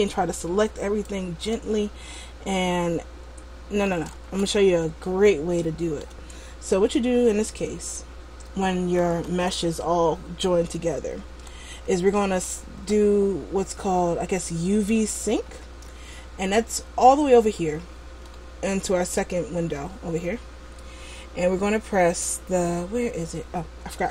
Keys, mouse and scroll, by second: 2.3 middle click, 4.4 a, 5.2 middle click, 9.2 l, 11.4 Tab, 18.3 middle click.